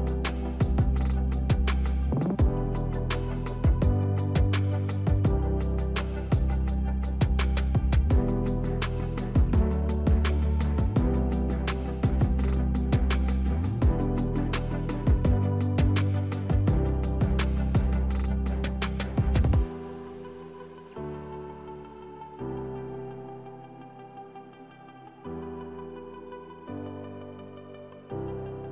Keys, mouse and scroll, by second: 1.2 click, 1.4 Delete, 2.3 click, 3.7 click, 5.7-12.1 drag, 13.4 click, 18.1 click, 22.9 click.